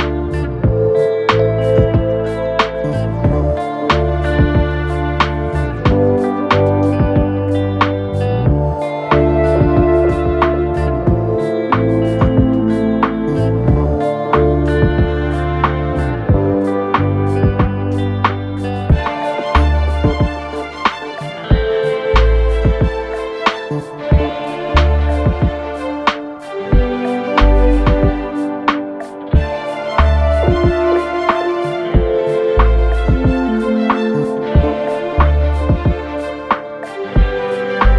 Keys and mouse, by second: 0.4 s, 2.3 g, 16.4 KP_1, 16.6 KP_3, 17.1 shift+d, 17.9 s, 19.1 r, 21.2 g, 23.3 g, 25.3 z, 25.6 z, 26.4-27.8 drag, 27.9 shift+d, 29.2 g, 30.0 r, 31.3 r, 35.9-37.9 drag.